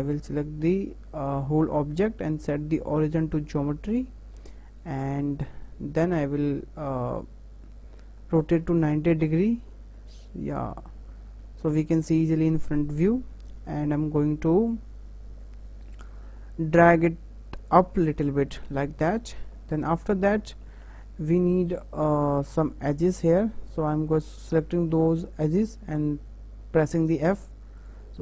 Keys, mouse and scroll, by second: 3.6 scroll down 3, 3.9-5.2 middle drag, 5.2-6.6 drag, 9.3-9.9 drag, 9.9-10.9 middle drag, 10.9 scroll up 2, 11.5 `, 12.4 scroll up 2, 12.7-13.6 shift+middle drag, 13.6 w, 14.7 click, 18.3-18.7 shift+middle drag, 18.7-19.1 scroll up 3, 19.1 shift+middle click, 19.5 scroll up 2, 19.9 Tab, 20.2 scroll down 1, 20.4 shift+middle click, 21.2 click, 22.0 shift+click, 27.2 f, 27.8 click.